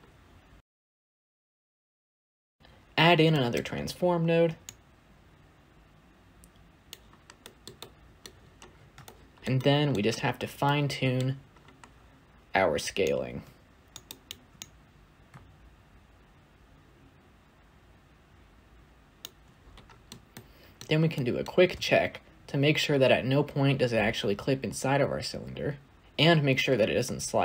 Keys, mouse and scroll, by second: 1.4 shift+a, 4.7-7.3 shift+drag, 7.3-8.1 shift+middle drag, 8.1-8.6 scroll up 12, 8.6 scroll down 3, 8.9-14.7 shift+middle drag, 14.7 alt+click, 16.2 shift+click, 16.7 scroll down 3, 16.7 middle click, 17.4-18.8 drag, 18.8 middle click, 18.9-19.6 scroll up 2, 19.6-19.9 scroll down 4, 19.9-21.6 shift+middle drag, 21.6 space.